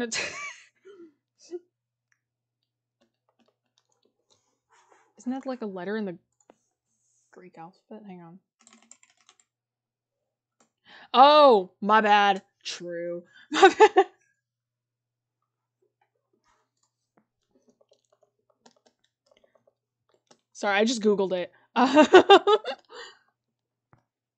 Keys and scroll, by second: 17.8-18.1 scroll down 1, 18.2-18.5 scroll up 1, 19.3-20.1 scroll down 1.